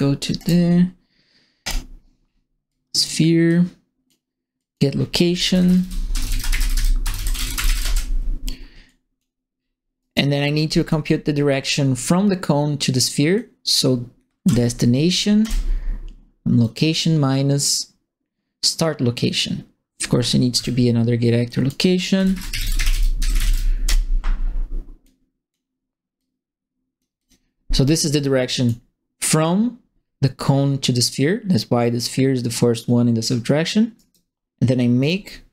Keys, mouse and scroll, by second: 0.3 click, 1.6 click, 2.2 middle click, 2.6 click, 3.4 click, 4.5 click, 5.1-8.2 typing, 8.8 click, 9.5 middle click, 9.9 right click, 10.6 click, 13.3 click, 14.4 KP_Subtract, 15.4 Return, 16.6-19.9 drag, 20.5 Escape, 21.4 click, 21.9-23.9 typing, 25.0 click, 26.1 click, 27.1 click, 28.4 click, 33.9 right click, 34.9 right click, 35.4-35.5 typing.